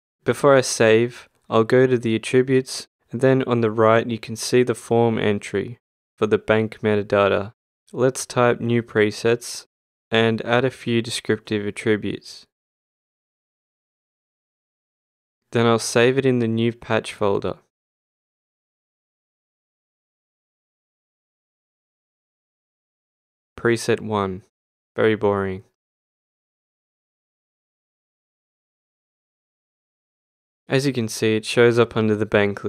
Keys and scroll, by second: 21.8-23.4 typing, 24.3 Return.